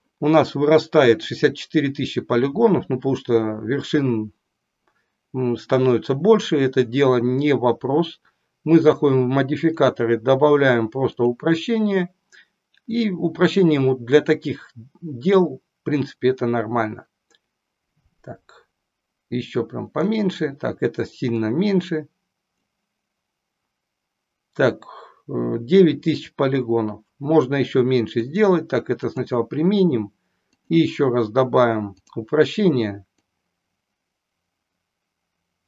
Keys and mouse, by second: 8.9 click, 9.9-11.4 drag, 12.9-20.0 drag, 21.4-23.0 drag, 28.1-29.8 drag, 30.5-32.1 drag, 33.3-35.6 drag.